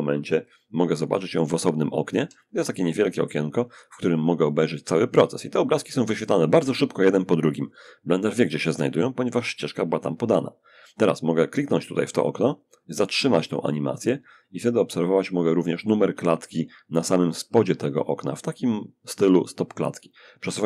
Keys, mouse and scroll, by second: 1.6-2.7 alt+drag, 11.4-16.3 drag, 17.6-20.6 drag.